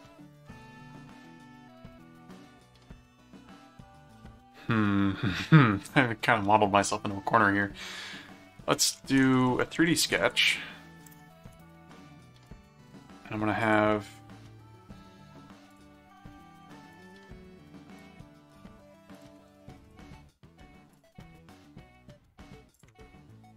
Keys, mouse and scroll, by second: 8.7-10.8 typing, 11.6 Return, 12.5 right click, 13.6 click, 13.9 middle click, 15.7 click, 16.9 right click, 18.0 click, 19.1 click, 19.9 right click, 20.9 click, 22.7 click, 23.3 right click.